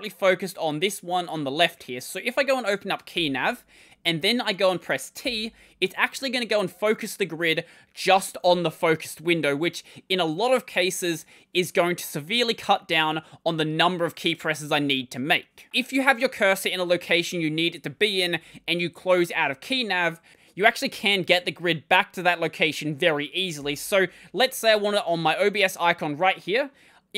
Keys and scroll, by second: 3.0 ctrl+;, 23.4 ctrl+;.